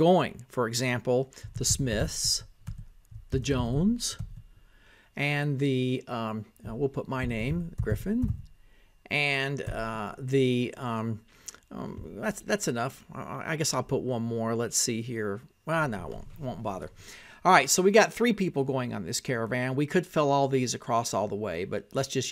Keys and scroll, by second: 0.0-4.9 typing, 5.7 Tab, 8.2-11.5 typing, 13.2-16.5 typing, 17.3 Tab, 19.1-22.3 typing.